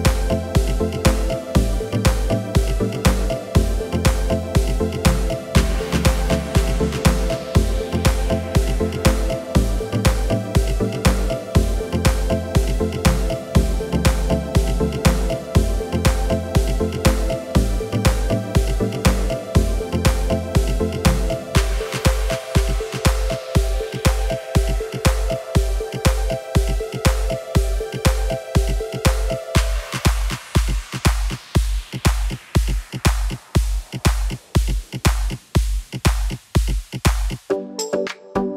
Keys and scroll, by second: 4.8 Tab, 8.9 ctrl+r, 22.1 s.